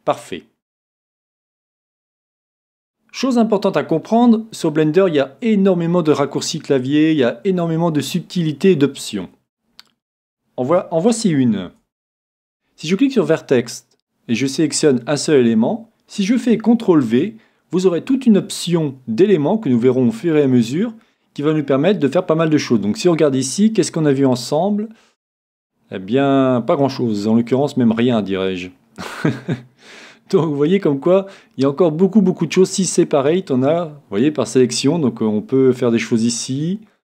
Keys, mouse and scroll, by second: 1.4-2.5 middle drag, 3.3-4.4 middle drag, 11.6 c, 13.1 c, 14.4-16.3 right drag, 17.0 c.